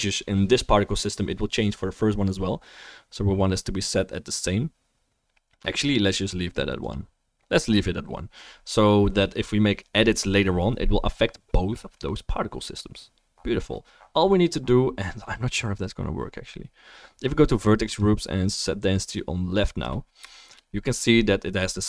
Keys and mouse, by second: 6.1-17.2 drag, 17.2-21.3 middle drag.